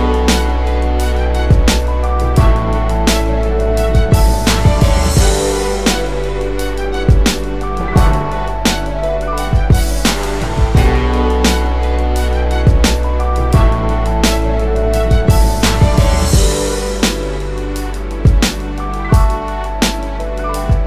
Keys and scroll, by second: 16.6 shift+space.